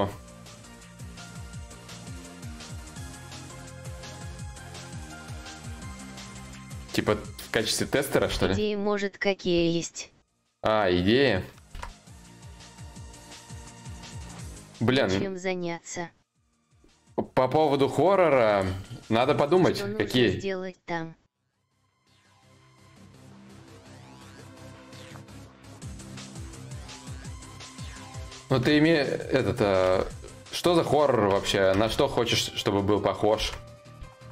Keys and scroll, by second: 7.9 ctrl+z, 11.3 ctrl+z, 33.0 ctrl+z.